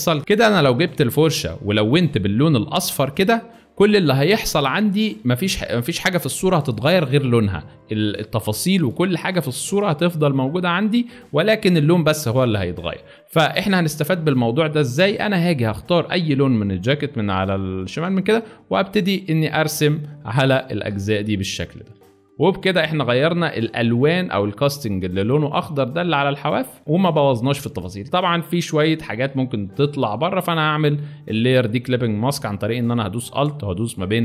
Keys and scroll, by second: 6.2 space, 9.6 alt+space, 12.0 ctrl+z, 12.7 ctrl+z, 22.9 space, 26.8 space, 28.3 space.